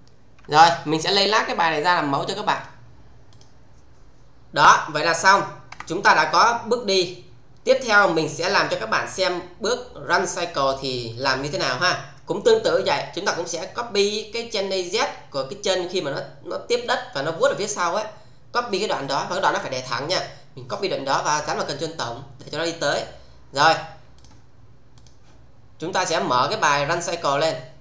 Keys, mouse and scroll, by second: 0.4 space, 2.5 click, 5.7 Tab, 24.2 click.